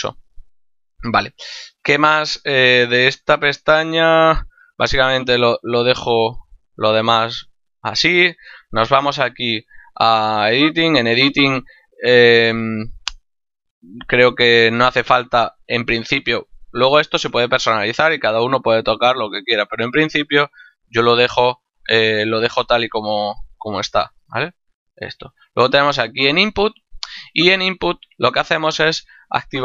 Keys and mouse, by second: 8.6 click, 10.6 click, 21.2 click, 24.8 click.